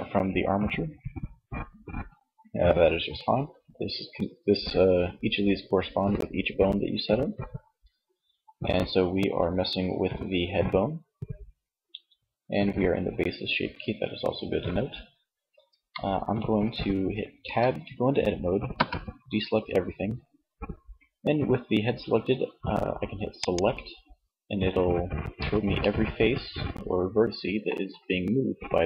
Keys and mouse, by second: 16.7 Tab, 18.0 a, 22.4-24.4 drag, 24.4 z, 26.6 z.